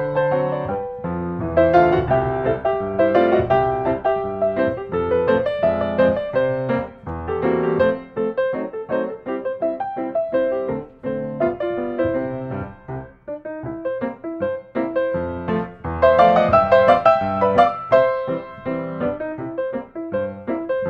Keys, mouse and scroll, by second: 1.5 click, 2.5 click, 3.9 click, 5.9 click, 8.6 click, 9.4 click, 10.5 click, 12.3 s, 13.2 click, 14.2 click, 15.4 click, 17.1 typing, 17.6 Return, 19.4 click, 20.0 click.